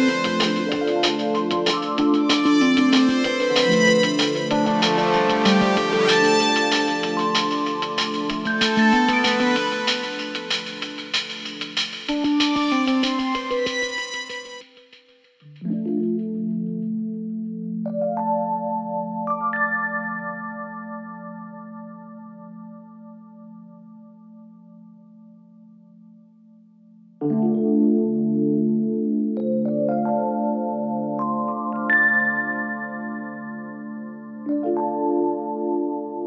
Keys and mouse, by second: 4.0 s, 7.1-8.4 middle drag, 9.0 s, 13.5 s, 16.8-17.5 middle drag, 18.1 s, 21.0-23.5 middle drag, 24.0 middle click, 25.4 g, 29.5 Tab, 30.1 click, 30.1 right click, 31.0 3, 31.6 click, 32.5 middle click, 33.6 g, 36.1-36.2 middle drag.